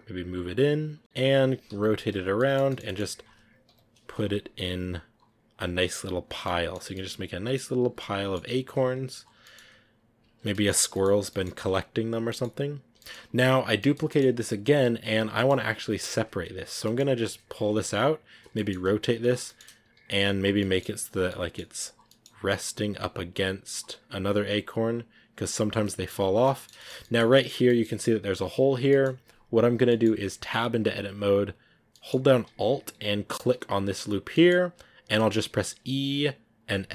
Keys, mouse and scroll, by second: 1.0 scroll down 1, 1.3 r, 2.3-3.6 middle drag, 3.6 KP_7, 4.8 g, 6.3-7.6 middle drag, 7.6 scroll down 3, 7.9 middle click, 8.2 scroll up 2, 8.5 right click, 8.7 scroll down 1, 8.9 s, 9.3-9.8 scroll up 2, 9.3 middle click, 10.8 shift+middle click, 11.2 shift+d, 12.1 scroll up 1, 12.2 middle click, 12.7 scroll down 1, 12.8 g, 13.6 scroll up 1, 13.7-14.8 shift+middle drag, 14.8 right click, 15.2 middle click, 15.7-16.7 right drag, 16.7-20.7 middle drag, 20.7-25.2 typing, 21.2 middle click, 21.9 scroll down 1, 22.0 middle click, 25.8 middle click, 26.2 scroll down 1, 26.3-27.3 middle drag, 27.3 scroll up 4, 27.6 middle click, 28.4 right click, 28.8-31.5 middle drag, 31.5 scroll down 3, 31.8-33.4 middle drag, 33.4 alt+right click, 34.2 middle click, 34.4 scroll up 1, 35.2 middle click, 35.6 e, 36.7 s.